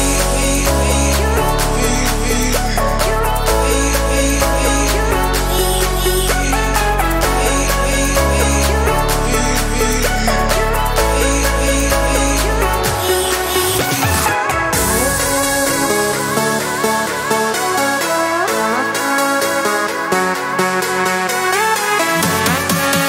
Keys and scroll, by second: 18.8 4, 19.2 Return.